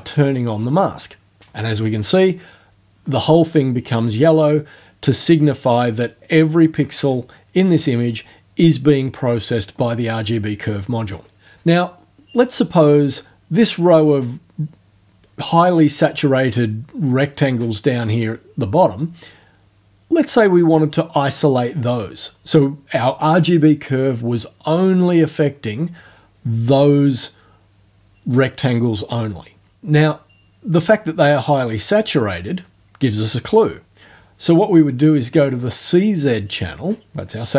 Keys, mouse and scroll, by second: 0.7 click, 11.2 click.